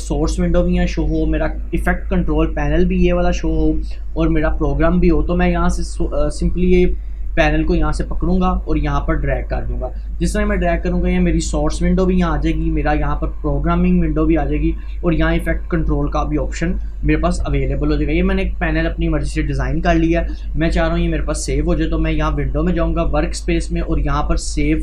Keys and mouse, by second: 2.3 click, 7.2-11.8 drag, 12.4 click, 22.3 click.